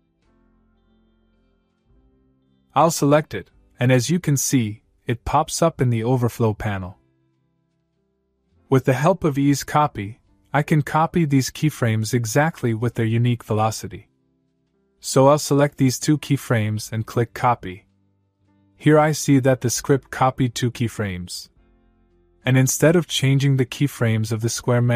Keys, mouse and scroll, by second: 2.6 click, 5.6-6.2 click, 6.5-7.3 click, 8.7-10.4 click, 11.4 click, 13.7 click, 15.3-16.1 click, 17.4 click.